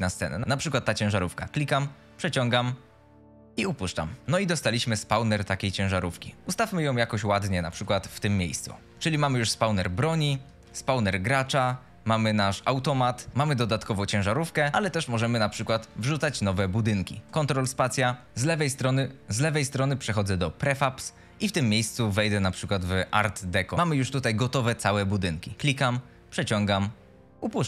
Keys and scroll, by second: 4.2 d, 6.4 e, 7.8-10.5 typing, 12.7-15.2 typing.